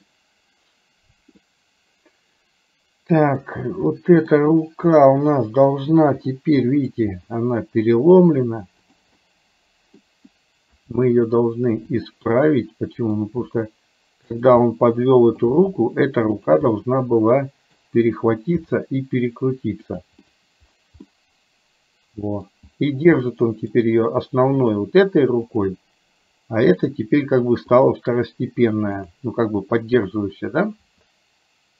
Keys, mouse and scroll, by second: 1.6-3.5 middle drag, 4.0 middle click, 5.1 click, 6.3 middle click, 7.1 r, 9.2 middle click, 10.8 r, 12.5 middle click, 13.5 r, 14.7 middle click, 15.5-16.5 scroll down 1, 16.5 r, 16.7-17.8 middle drag, 16.7-17.6 scroll down 1, 18.7 g, 20.2 scroll up 1, 21.2-22.6 middle drag, 23.2 middle click, 24.7 click, 25.7 click, 27.7 click, 30.8 r.